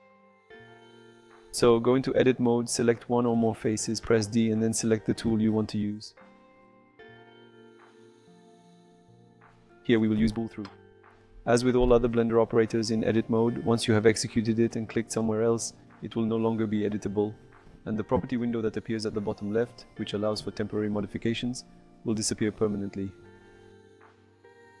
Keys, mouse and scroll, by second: 0.6 3, 1.3 click, 2.0-3.0 middle drag, 4.2 i, 5.6 click, 6.4 middle click, 8.1 d, 13.4 middle click, 13.5 typing, 14.4 click, 15.6 click, 16.1 d, 17.2 middle click, 19.1 click, 21.7-23.8 drag, 24.4 middle click.